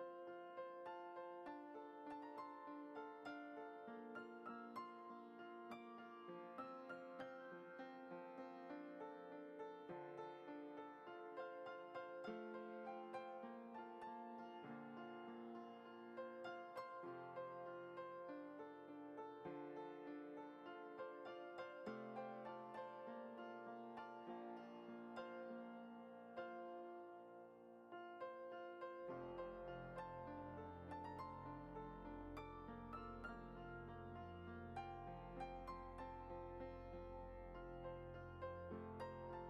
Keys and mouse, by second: 0.1 a, 0.4-0.7 middle drag, 1.1 alt+e, 4.1 ctrl+Tab, 4.6 click, 5.1 Tab, 5.4-5.7 middle drag, 5.9 a, 6.4 e, 8.5 Tab, 8.9 click, 9.5 middle click, 10.9 shift+a, 12.6 g, 13.8 s, 14.7 g, 15.8 g, 17.0 shift+middle click, 17.4 middle click, 18.3 g, 19.7 g, 20.9 g, 22.5-22.9 middle drag, 23.1 Tab, 23.9 middle drag, 24.4 middle click, 24.9 drag, 25.2 g, 27.5 click, 27.8 g, 29.2 middle drag, 29.7 shift+middle click, 30.4 e, 33.3 e, 36.8 click, 37.7 alt+shift+click.